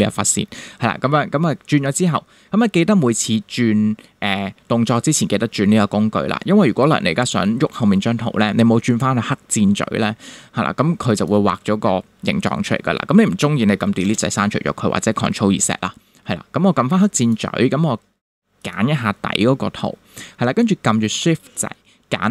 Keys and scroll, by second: 14.0 BackSpace.